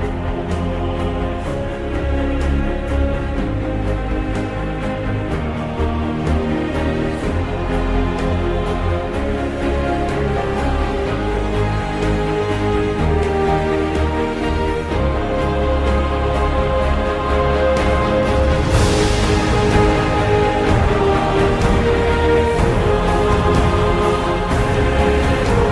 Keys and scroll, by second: 1.1 Up, 2.6 F2, 3.4 shift+7, 4.0 shift+', 4.9 Return, 18.2 Down, 18.7 Right.